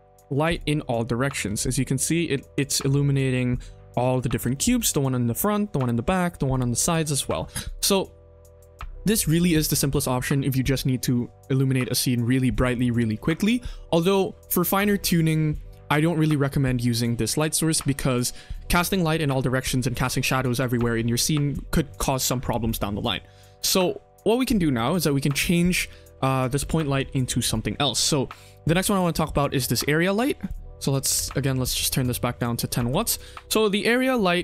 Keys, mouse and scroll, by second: 0.7 middle click, 1.5 shift+middle click, 1.7-2.1 middle drag, 2.5 click, 2.8 middle drag, 3.2 shift+scroll up 1, 3.2 shift+middle drag, 4.4 shift+middle drag, 7.1 ctrl+s, 7.8 click, 22.7 middle click, 23.4 middle click, 23.8 shift+middle click, 24.4 middle click, 25.8 shift+middle drag, 26.9 ctrl+s, 28.8 click, 30.3-31.4 drag, 32.3 shift+click, 32.8 click.